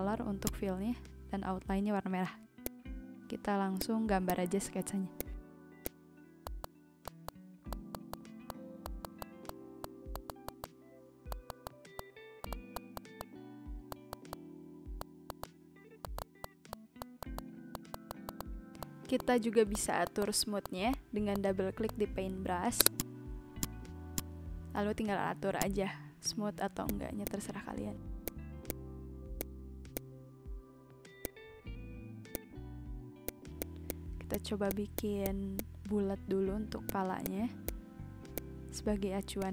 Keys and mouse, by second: 0.4 click, 1.0 ctrl+z, 2.7 click, 3.8 click, 4.1 ctrl+z, 4.3 click, 5.2 click, 5.8 click, 6.4 click, 6.6 click, 6.7 ctrl+z, 7.0 click, 7.2 click, 7.7 click, 7.9 click, 8.0 z, 8.5 click, 8.8 click, 8.9 ctrl+z, 9.0 click, 9.2 click, 9.4 click, 9.8 click, 10.1 click, 10.3 click, 10.4 click, 10.5 ctrl+z, 10.6 click, 11.3 click, 11.5 click, 11.9 ctrl+z, 12.0 click, 12.4 click, 12.7 click, 12.8 ctrl+z, 12.9 click, 13.2 click, 13.9 click, 14.1 click, 14.3 click, 15.0 click, 15.3 click, 15.3 ctrl+z, 15.4 click, 15.9 v, 16.0 click, 17.7 click, 18.4 click, 18.5 b, 18.8 click, 19.2 click, 19.6 v, 19.7 click, 20.2 click, 20.6 click, 20.9 click, 21.2 b, 21.3 click, 21.8 click, 22.9 click, 26.8 click, 28.2 click, 28.5 ctrl+z, 28.7 click, 29.4 click, 29.9 click, 30.7 v, 30.8 click, 31.5 click, 32.3 click, 33.6 click, 33.9 click, 34.0 v, 34.1 b, 34.3 click, 34.5 ctrl+z, 34.7 click, 34.8 ctrl+z, 34.9 click, 35.2 click, 35.4 ctrl+z, 35.6 click, 36.9 click, 37.1 z, 37.2 click, 37.7 click, 38.3 click, 39.4 click.